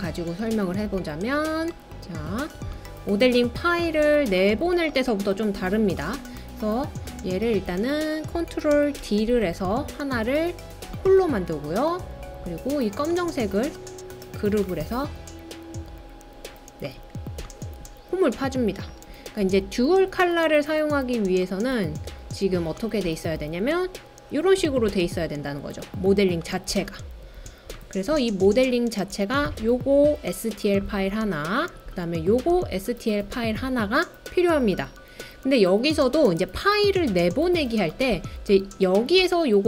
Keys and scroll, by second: 0.7 super+v, 9.0 super+d.